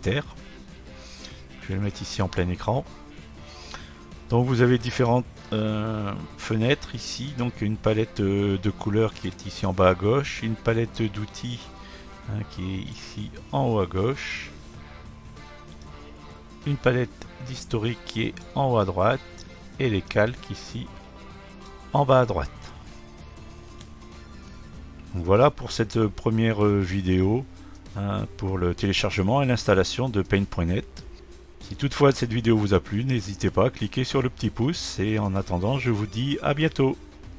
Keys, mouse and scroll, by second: 2.8-5.5 drag, 9.1 click, 9.3 click, 12.3 click, 12.9 click, 15.0 click, 18.4-21.4 drag, 21.5 click, 21.7-24.4 drag.